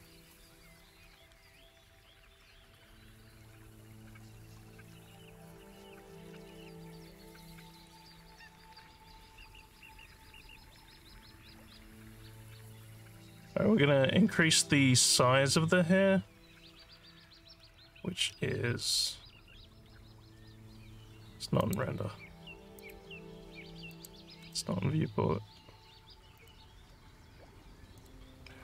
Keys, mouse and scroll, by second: 2.3 click, 6.3 alt+click, 7.3 alt+scroll up 1, 7.7 alt+middle click, 8.2-12.4 alt+drag, 12.7 alt+middle click, 14.3 scroll up 2, 17.0 scroll up 2, 17.6 scroll down 1, 18.3 scroll down 1, 21.6 click, 22.8 click, 23.9 click, 24.5 click, 26.4 click, 27.9 click.